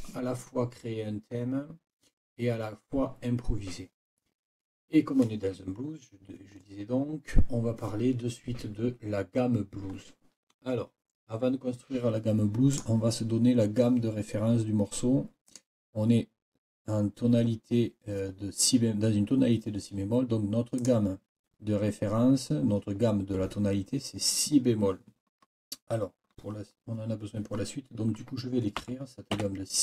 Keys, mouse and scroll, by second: 12.7 click, 15.5 click, 20.8 click, 28.8 n, 29.3 5.